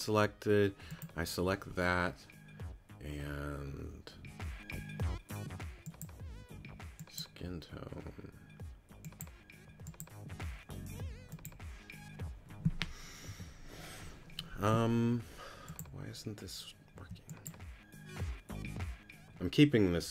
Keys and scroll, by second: 13.3 q, 16.9 q.